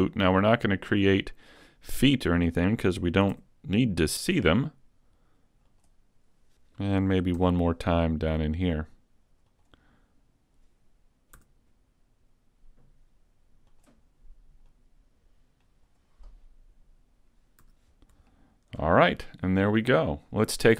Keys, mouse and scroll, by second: 3.4 s, 5.8 click, 6.0 click, 6.2 scroll down 2, 7.4 e, 9.6 click, 11.4 s, 13.8 click, 14.7 click, 16.9 scroll down 1, 17.7 a, 17.9-18.5 scroll down 3, 18.3 shift+middle click.